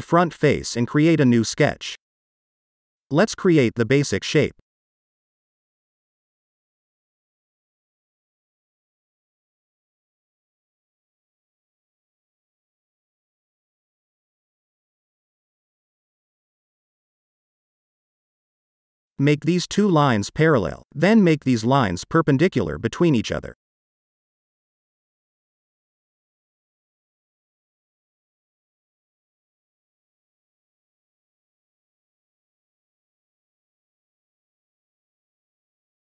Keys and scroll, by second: 20.7 shift+p, 25.4 n, 30.7-31.9 typing.